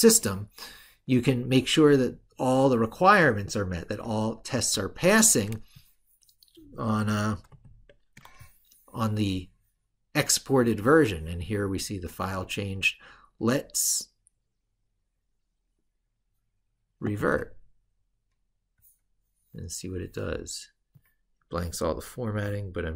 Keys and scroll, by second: 7.3 ctrl+super+Left.